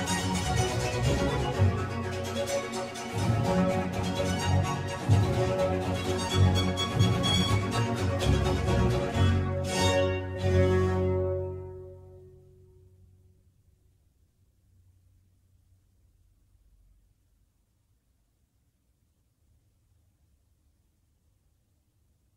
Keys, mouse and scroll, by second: 2.5-4.9 scroll up 1, 4.9-11.0 scroll up 1, 11.0-11.7 scroll up 1, 11.7-12.8 scroll up 1, 12.8-13.4 scroll up 1, 13.4-15.4 scroll up 1, 15.4-17.4 scroll up 1, 17.4-18.4 scroll up 1, 18.4-20.1 scroll up 1, 20.1-20.9 scroll up 1, 20.9-22.3 scroll up 1.